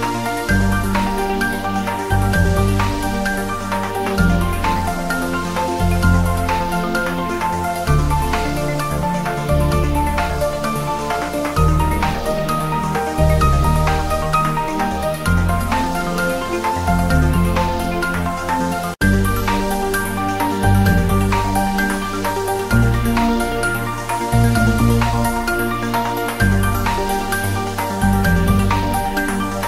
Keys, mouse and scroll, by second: 1.1-1.6 drag, 4.1-4.9 scroll down 1, 4.9-5.4 click, 5.4-6.0 scroll up 1, 7.2 scroll down 1, 8.1-9.8 drag, 12.3 click, 14.4 ctrl+s, 18.3 click, 19.6-20.1 scroll down 1, 20.1 g, 20.3 click, 20.4 scroll up 1, 21.3 click, 22.0 Return, 25.5 click, 26.1 Return, 29.5 ctrl+s.